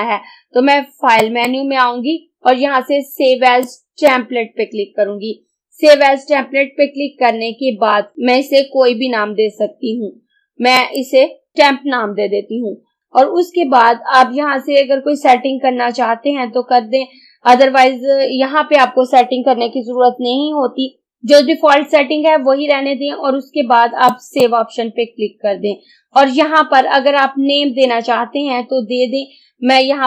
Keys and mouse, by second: 1.3 click, 3.7-6.7 drag, 10.8 click, 11.3-12.0 typing, 13.0 click, 24.1 click.